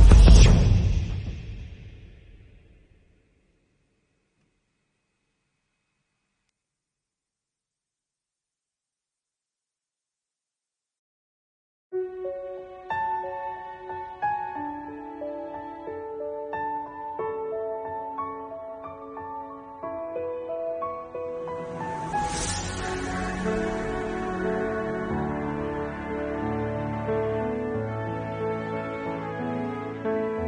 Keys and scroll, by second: 0.9 4, 1.1 space, 2.0 ctrl+z, 4.1 ctrl+alt+z, 8.1 ctrl+alt+z, 15.1 ctrl+alt+z, 21.5 ctrl+s, 24.4 ctrl+s, 25.6 ctrl+alt+z, 26.7 7, 29.1 ctrl+alt+z.